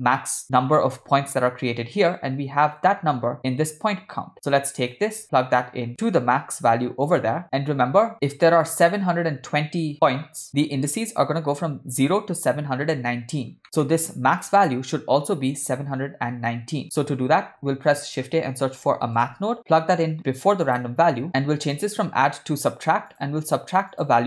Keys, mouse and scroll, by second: 0.1-0.6 scroll down 1, 0.8 ctrl+middle click, 5.0 drag, 5.2-7.2 drag, 8.1 shift+middle click, 8.1 scroll down 1, 13.6 scroll up 1, 13.9 ctrl+middle click, 14.5 click, 17.0 scroll down 1, 17.0 middle click, 17.5 shift+a, 21.3 click, 21.3 ctrl+middle click, 21.7 click, 22.6-23.3 drag, 24.0 click.